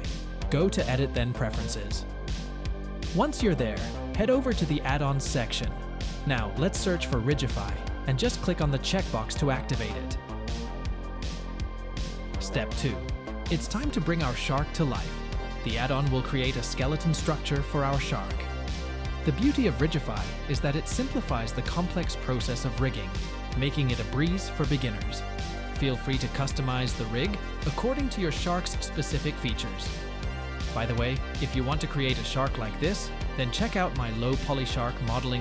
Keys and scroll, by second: 13.1 ctrl+a, 15.2 shift+a, 20.9 Tab, 21.7 s, 23.6 g, 28.2 g, 28.8 ctrl+Tab, 30.9 r, 31.6 r, 31.8 z, 33.0 r, 33.2 z.